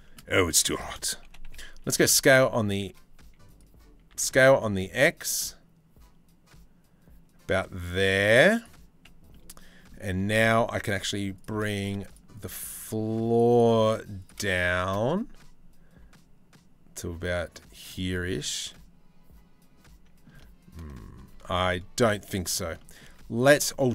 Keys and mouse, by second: 0.9 g, 3.7 s, 10.0 shift+middle click, 11.0 shift+middle click, 11.7 shift+middle click, 14.3 g, 17.9-19.9 middle drag, 20.8 ctrl+z, 21.2 middle click, 22.2 shift+middle click, 22.4 middle click, 23.3 z.